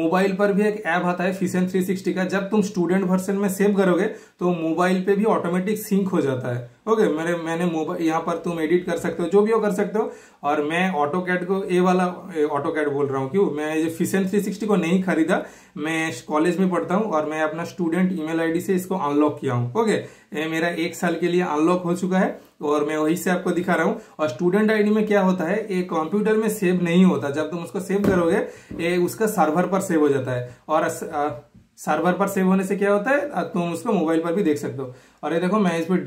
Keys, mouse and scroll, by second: 30.0 super+click, 30.0 typing, 35.2 super+click.